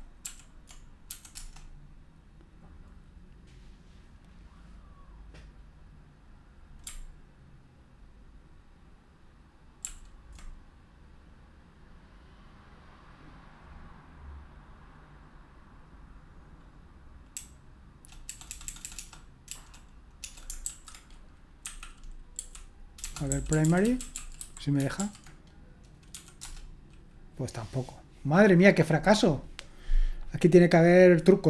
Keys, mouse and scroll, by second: 0.2 ctrl+p, 1.1 ', 1.4 Return, 9.8 ctrl+p, 17.3-24.9 typing, 26.1 typing, 26.4 Return.